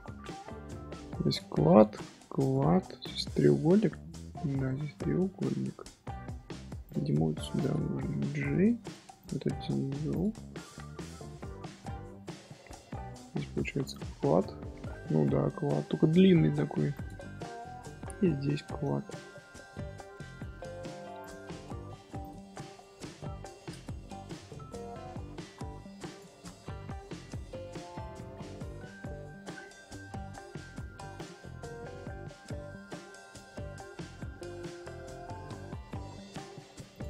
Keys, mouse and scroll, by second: 1.1 3, 1.3 click, 1.6-2.4 middle drag, 2.4 click, 3.0 click, 3.4 scroll down 1, 3.4 scroll up 1, 3.6-6.4 middle drag, 6.4 1, 6.8 click, 7.6 shift+click, 8.6 j, 9.2 click, 11.1 Tab, 11.6-12.0 middle drag, 12.0 Tab, 13.9 click, 16.2 middle click, 16.9 click, 18.5 shift+middle click, 19.1 1, 19.6-21.2 middle drag, 21.2 click, 21.4 middle click, 22.2 shift+click, 23.4 j, 24.2-26.1 middle drag, 26.1 click, 26.5-27.1 middle drag, 27.1 Tab, 27.6 Tab, 27.9 scroll down 1, 28.0-28.6 middle drag, 28.6 Tab, 29.1-30.7 middle drag, 30.7 Tab, 31.1 click, 31.3-32.9 middle drag, 32.9 scroll down 1, 33.0 scroll up 1, 33.1 scroll down 1, 33.2 scroll up 2, 33.4 z, 34.9 middle click, 35.1 Tab, 35.5 Tab, 36.9 click.